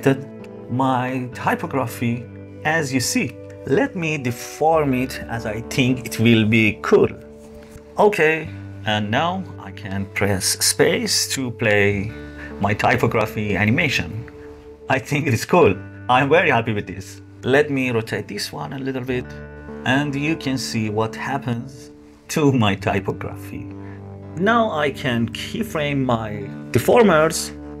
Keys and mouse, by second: 0.9 g, 4.8-7.2 typing, 7.7 shift+Left, 9.6 space, 17.4 r, 19.5 space, 23.5 space, 24.7 click, 27.5 click.